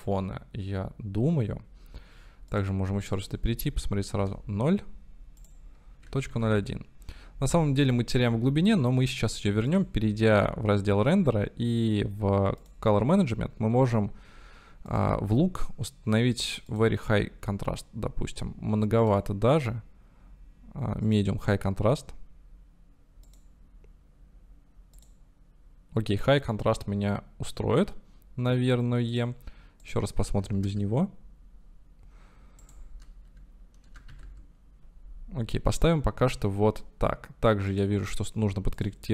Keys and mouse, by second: 0.0 click, 2.5 click, 3.1-7.4 drag, 9.8 click, 12.7 click, 14.9-17.7 drag, 19.1-22.1 drag, 23.3-25.9 drag, 29.1 click, 29.8-35.7 drag, 37.7-38.3 drag.